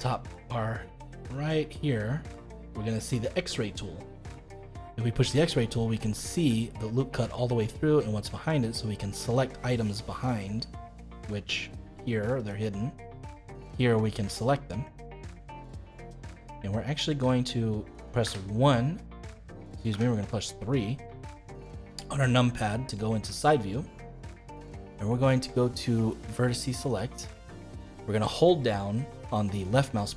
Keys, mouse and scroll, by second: 5.2 click, 5.9-12.3 middle drag, 12.3-13.8 drag, 13.8 middle click, 14.8 click, 15.3-18.2 middle drag, 18.2 KP_1, 19.9 KP_3, 20.7-21.1 scroll up 5, 21.1-23.1 shift+middle drag, 23.1-23.5 scroll down 2, 23.5-26.1 shift+middle drag, 26.1-29.2 drag, 29.7 click.